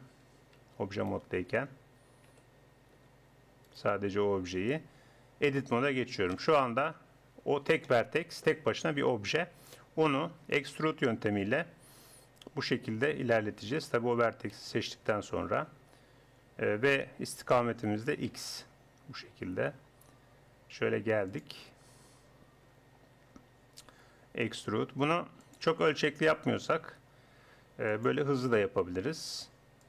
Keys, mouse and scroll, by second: 0.6 Tab, 2.3 g, 5.5 Tab, 6.3 KP_1, 11.7 middle click, 12.3 e, 14.6 a, 14.9 e, 22.3-24.1 middle drag, 24.1 e, 25.7 e, 28.4 e.